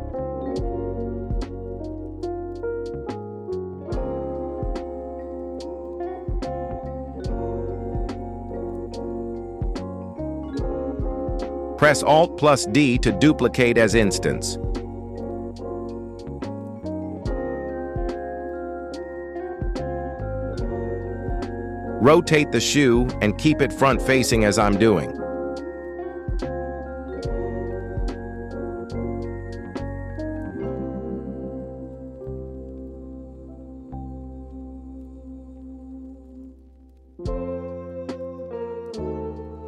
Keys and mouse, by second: 3.4 KP_1, 5.1 s, 6.8-9.2 typing, 12.0 alt+d, 13.8 x, 13.9 x, 14.0 x, 14.2 click, 18.5 click, 19.0-19.3 middle drag, 20.4 r, 22.6 r, 24.0 z, 24.1 z, 24.1 z, 24.3 middle click, 25.0 g, 26.7 r, 29.0 z, 29.0 z, 29.1 z, 29.6 g, 30.9 z, 31.0 z, 31.1 z, 31.1 z, 31.5-31.8 middle drag, 32.7 shift+middle drag, 33.6 g, 36.8 y, 37.2 g.